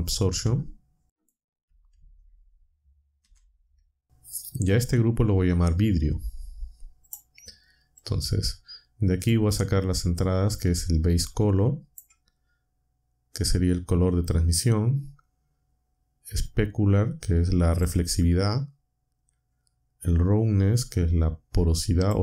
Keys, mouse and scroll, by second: 1.1 shift+click, 3.2 g, 7.1 click, 8.0-9.4 drag, 11.0-12.1 drag, 16.4-18.0 drag, 20.9-22.2 drag.